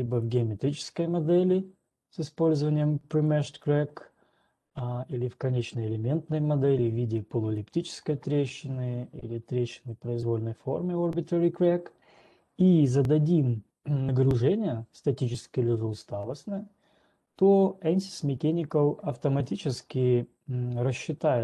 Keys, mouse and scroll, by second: 0.7 click, 3.7 click, 5.2-15.7 drag, 5.2-5.7 scroll.